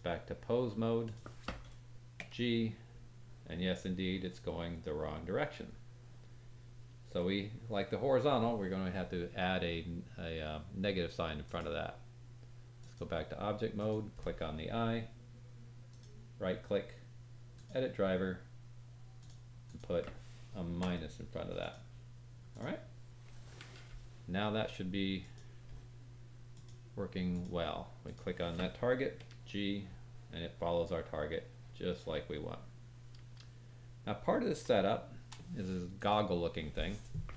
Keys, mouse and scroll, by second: 2.2 g, 5.4 click, 11.4-13.9 drag, 11.4-13.7 middle drag, 11.4-13.7 right drag, 15.9 right click, 22.5 click, 25.2 click, 26.5-28.1 drag, 29.2 g, 34.7 shift+middle click, 35.9 click.